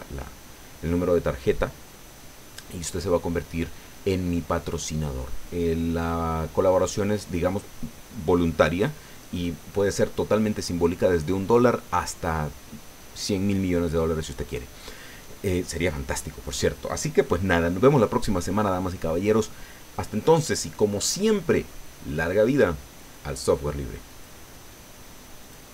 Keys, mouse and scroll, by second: 24.1 click, 25.4 click.